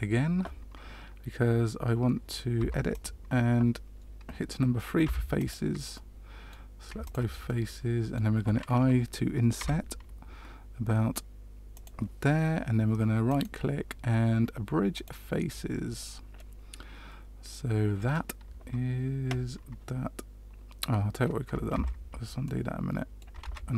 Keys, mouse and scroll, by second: 2.5 Tab, 2.8 click, 5.0 3, 5.3 click, 5.9 middle click, 7.0 shift+click, 7.4 middle click, 9.5 i, 13.2 right click, 16.3 middle click, 21.7 ctrl+z, 22.4 middle click, 23.4 ctrl+z.